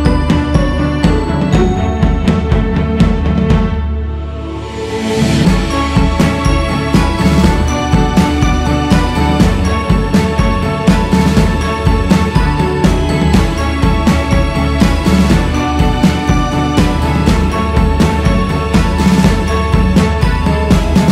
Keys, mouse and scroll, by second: 3.1-8.3 drag, 8.3 scroll down 2, 9.0-9.6 scroll down 2, 9.6 click, 10.4 scroll up 2, 10.8 click, 12.6-19.9 drag, 19.9-20.5 scroll down 4.